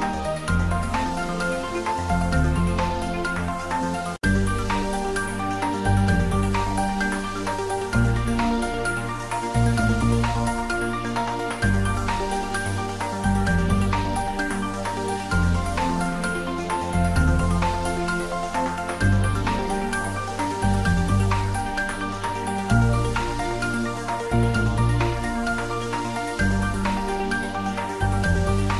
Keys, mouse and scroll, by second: 1.9 click, 4.3-5.8 drag, 5.8 `, 6.0 3, 7.5 click, 9.8-10.4 scroll down 1, 11.4 a, 11.9 a, 12.8 Tab, 13.9 click, 14.3 scroll down 1, 15.1 click, 16.3-16.6 scroll up 1, 16.6 s, 17.3 a, 17.9 g, 19.4 click, 19.8 s, 21.6 click, 22.2 g.